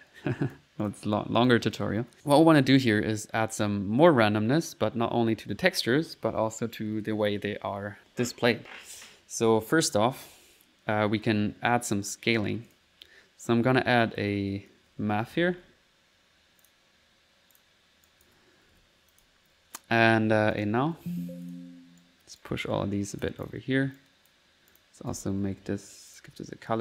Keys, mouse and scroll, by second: 0.9 click, 1.2 click, 11.3 right click, 12.1 click, 12.7 click, 15.1-16.1 typing, 16.7 click, 17.6 click, 18.1 click, 18.7 p, 19.1 click, 19.5 middle click, 20.6 alt+click, 21.0 n, 21.5 alt+click, 21.9 alt+n, 22.0 alt+right click, 22.6 alt+click, 23.4 click, 24.0 click, 24.5 click, 24.5-26.3 typing, 26.1 click.